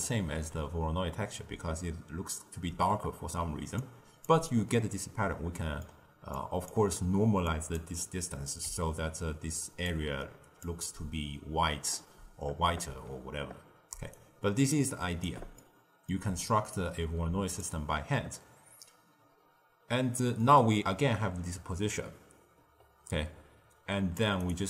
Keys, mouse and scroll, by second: 3.7 click, 5.5-6.3 middle drag, 6.3 click, 7.4 click, 8.6-9.6 d, 9.8-10.6 drag, 10.6 d, 10.7 d, 13.8 d, 14.1 right click, 15.2 d, 15.5-16.6 middle drag, 16.6 click, 18.7-19.8 scroll up 1, 20.3 drag.